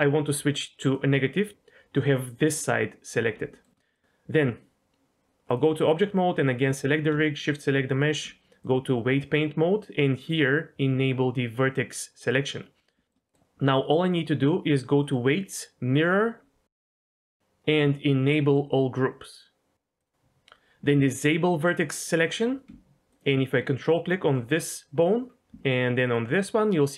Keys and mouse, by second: 3.5 shift+middle click, 3.9 middle click, 5.5-5.9 drag, 6.7-7.1 drag, 8.7-9.2 drag, 12.2 click, 12.8 middle click, 13.0 shift+middle click, 13.3-15.0 middle drag, 15.0-16.4 drag, 20.0 click, 22.1 click, 23.1 ctrl+click, 26.0 ctrl+click.